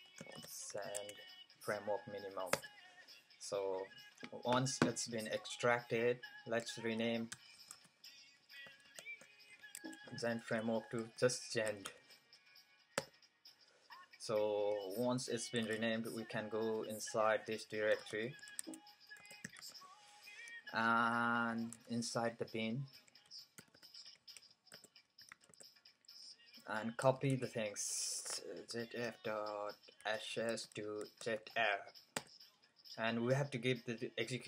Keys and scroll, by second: 0.0-0.7 typing, 0.9 Tab, 4.8-5.2 typing, 7.3-7.7 typing, 8.8-12.3 typing, 9.8 Tab, 15.3-16.2 typing, 17.7-19.0 typing, 21.4-24.9 typing, 27.2-31.4 typing.